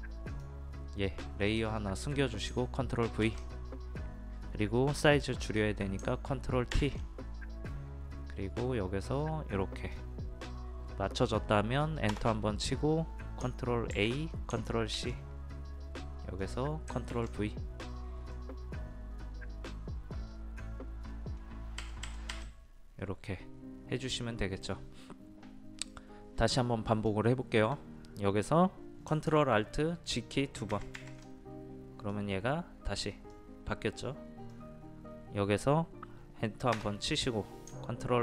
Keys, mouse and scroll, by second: 3.2 ctrl+v, 8.6 click, 12.1 Return, 13.9 ctrl+a, 14.9 ctrl+c, 16.4 click, 17.1 ctrl+v, 18.4-21.5 drag, 21.8 Right, 22.0 Right, 22.3 Right, 26.8 click, 30.8 ctrl+alt+z, 31.0 ctrl+alt+z, 32.1-35.5 drag, 36.8 Return.